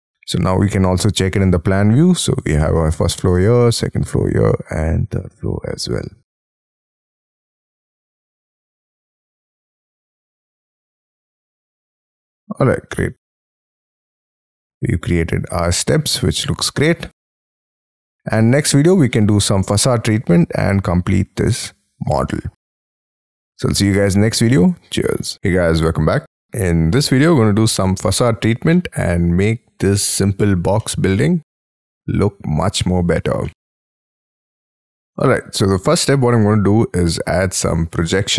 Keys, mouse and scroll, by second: 0.0 Escape, 7.9 middle click, 12.9 middle click, 17.1 scroll down 4, 17.8 middle click, 17.9 scroll down 1, 22.4 middle click, 23.8 middle click.